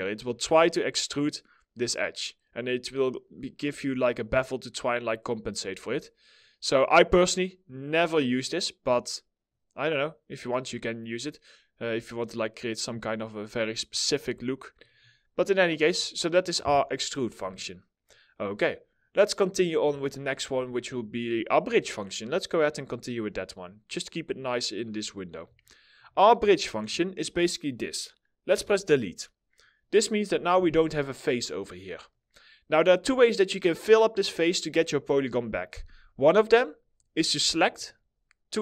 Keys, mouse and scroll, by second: 15.9 middle click, 17.0 4, 19.6 alt+middle click, 23.1 middle click, 24.8 scroll up 1, 25.1 alt+middle click, 25.7 middle click, 28.0 Delete.